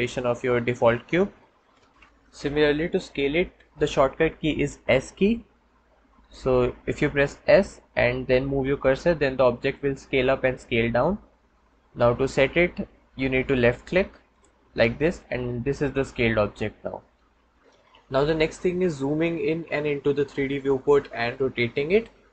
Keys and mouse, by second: 6.1 s.